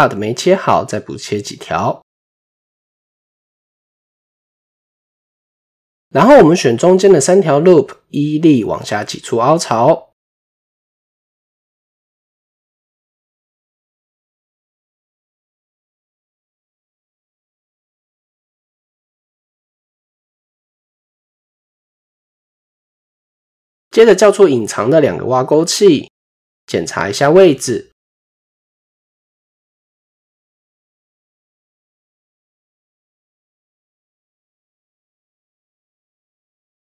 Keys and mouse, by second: 1.3 middle click, 1.8 ctrl+r, 3.7 middle click, 5.4 shift+middle click, 6.1 alt+click, 7.3 middle click, 8.0 middle click, 13.4-14.9 middle drag, 15.4 middle click, 16.6-18.1 drag, 18.3 middle click, 19.5 Tab, 20.3 middle click, 21.9 KP_7, 22.7 shift+middle click, 25.2 click, 25.5 click, 25.9 middle click, 27.9-28.9 middle drag, 29.3-29.6 middle drag, 30.8-32.1 middle drag, 32.6 click, 32.7 typing, 33.8-35.0 drag, 35.5 KP_1.